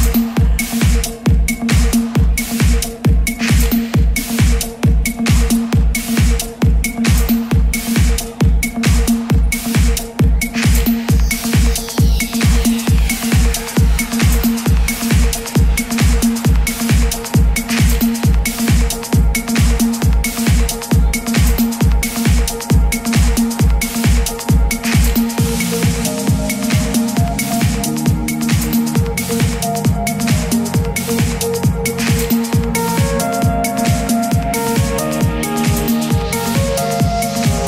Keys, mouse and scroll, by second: 1.0-9.4 drag, 9.5-9.8 typing, 14.8 click, 16.8 typing, 21.1 click, 23.9-24.2 typing, 32.3 click.